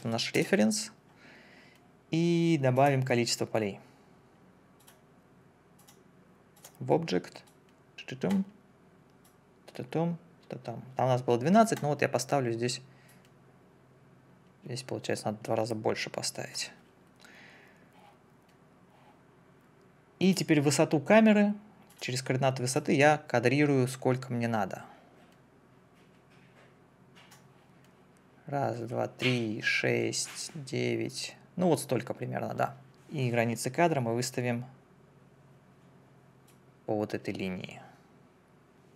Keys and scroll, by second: 0.0 0, 0.4 Return.